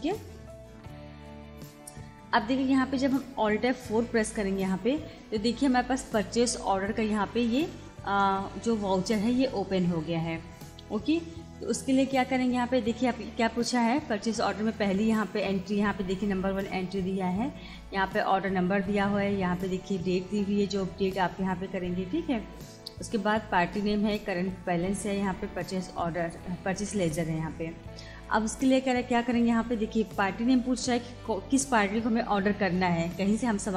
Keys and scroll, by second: 4.5 alt+F4.